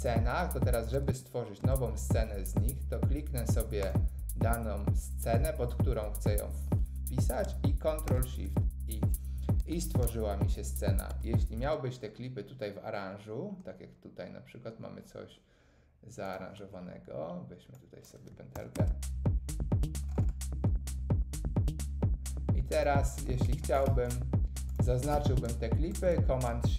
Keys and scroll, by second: 8.0 shift+super+i, 11.0 Tab, 11.5 space, 18.5 super+l, 18.7 space.